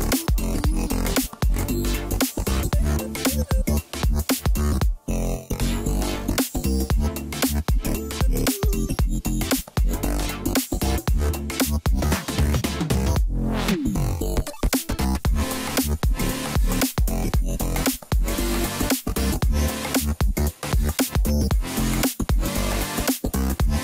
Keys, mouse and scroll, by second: 0.7 ctrl+b, 5.6-8.1 drag, 8.1-8.5 scroll down 1, 8.5 Tab, 8.9 middle click, 9.5-10.1 scroll down 2, 10.1 KP_1, 11.0 Tab, 12.8 shift+b, 16.9 2, 17.4 click, 17.6 click, 17.9-20.1 scroll down 12, 20.1 click, 21.2 c.